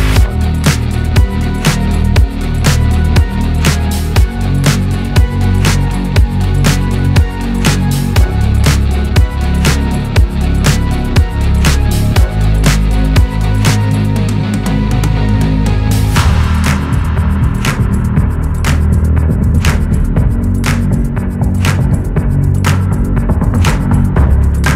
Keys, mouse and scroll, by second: 1.1 KP_1, 1.6-2.0 scroll up 4, 2.4-2.8 scroll down 1, 2.8 ctrl+z, 2.9 ctrl+z, 3.1-3.8 ctrl+z, 4.8 click, 4.9 Tab, 6.0 shift+middle click, 6.8 ctrl+r, 10.3 shift+middle click, 11.3 scroll down 2, 11.8 ctrl+r, 17.0 ctrl+r, 18.9 ctrl+z, 20.0 g, 22.9 Tab, 23.1 scroll down 1, 23.8 shift+middle click, 24.2-24.6 scroll up 6, 24.6 Tab.